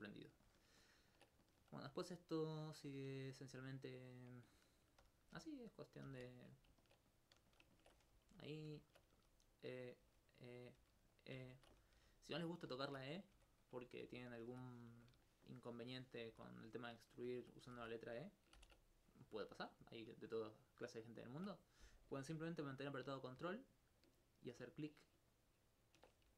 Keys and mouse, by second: 1.9 right click, 2.3 shift+right click, 5.0 shift+f, 5.3 shift+d, 5.7 right click, 6.1 shift+d, 6.6 click, 8.6 click, 9.9 click, 10.1 click, 10.6 click, 10.8 click, 11.1 click, 12.5 click, 13.7 click, 14.4 alt+right click, 15.9 shift+click, 16.3 shift+g, 17.0 shift+click, 18.6 ctrl+n, 19.8 alt+right click, 24.5 ctrl+click, 25.3 ctrl+click.